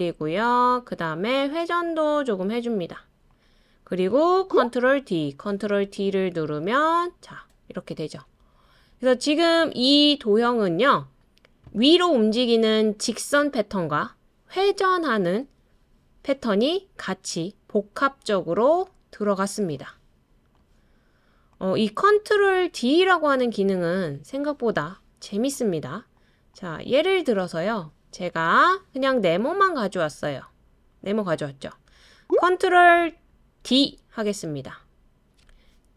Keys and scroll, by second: 4.8 super+d, 5.5 super+d, 5.8 super+d, 33.6 super+d.